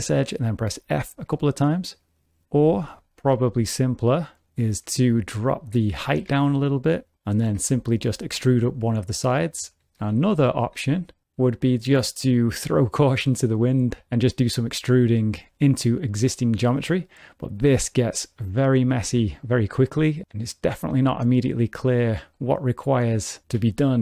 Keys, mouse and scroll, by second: 0.3 f, 0.7 f, 2.7 ctrl+z, 2.9-3.4 ctrl+z, 3.5 ctrl+z, 5.0 3, 5.1 click, 5.5 shift+click, 6.2 g, 7.5 3, 7.8 click, 8.4 e, 10.0 ctrl+z, 10.2 ctrl+z, 10.4 ctrl+z, 10.5 ctrl+z, 11.5 click, 14.4 e, 17.2 middle click, 18.1 shift+middle click, 19.1 1, 19.4 click, 20.2 shift+click, 20.2 middle click, 20.2 x, 20.9 x, 22.3 middle click, 23.7 shift+middle click.